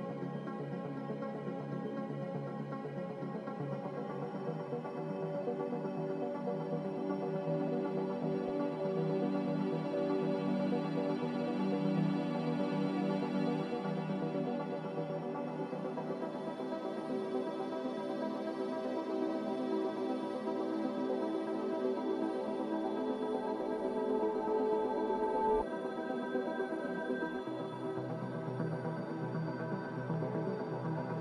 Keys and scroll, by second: 8.0 Right, 8.9 b, 10.3 Insert, 10.9 Insert, 11.8 Insert, 15.4 Delete, 16.6 Delete, 17.0 m, 24.7 Escape, 24.8 Escape, 24.9 Escape, 27.3 b, 29.1 b.